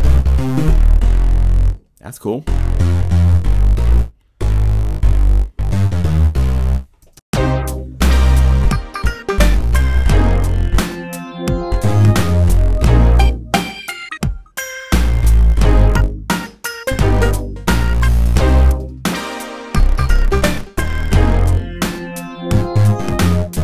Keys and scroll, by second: 7.0 0, 7.1 Return.